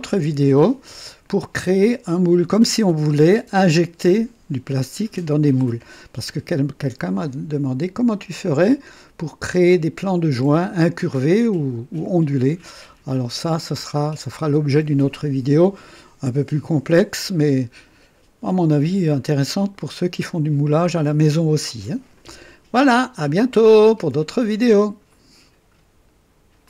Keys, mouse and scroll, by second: 0.8-1.8 drag, 3.6-4.4 drag, 6.3-8.6 drag, 11.1 click, 12.6-13.3 drag, 13.7-14.5 drag, 19.2-20.8 drag, 25.0 right click, 26.6 click.